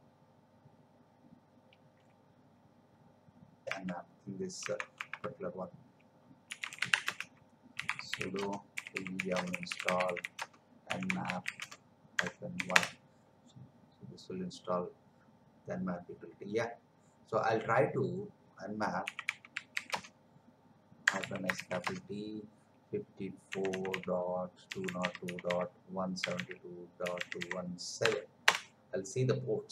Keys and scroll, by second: 3.8 alt+Tab, 6.4 c, 7.0 Return, 7.7-12.1 typing, 12.7 Return, 19.0 n, 19.9 space, 21.5 shift+t, 21.8 space, 23.5 5, 24.8-25.7 typing, 27.5 1, 28.0 7, 28.4 Return.